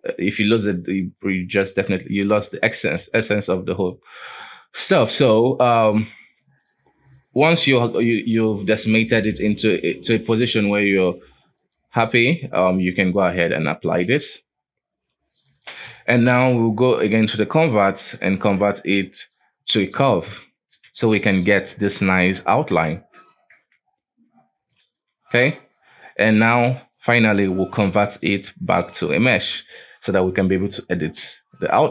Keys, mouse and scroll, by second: 0.8-1.6 scroll down 3, 1.6-4.1 scroll up 1, 4.1-4.6 scroll up 2, 4.6-5.7 shift+middle drag, 5.7 right click, 6.1 right click, 6.6-7.6 scroll down 2, 7.6-9.9 scroll up 2, 9.9-10.7 scroll up 1, 10.7-11.6 scroll down 1, 11.6 click, 12.1 click, 13.1-18.6 drag, 20.6-20.9 scroll down 2, 20.9 alt+a, 21.2 middle click, 21.4-21.9 scroll up 5, 21.9-22.5 middle drag, 22.5 right click, 22.9 Tab, 23.5 Tab, 25.3 F4, 26.5-29.5 drag, 29.7-30.0 scroll down 3, 30.0 F4.